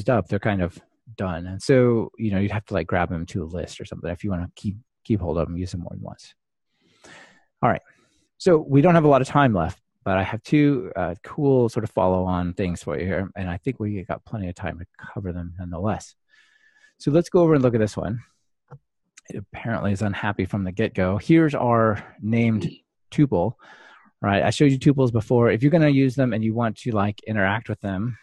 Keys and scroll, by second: 16.5 ctrl+shift+r.